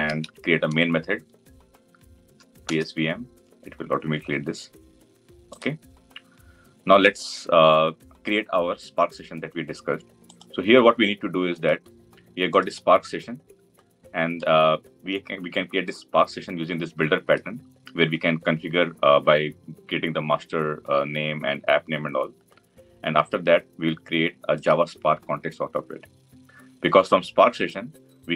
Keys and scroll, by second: 2.7 Return.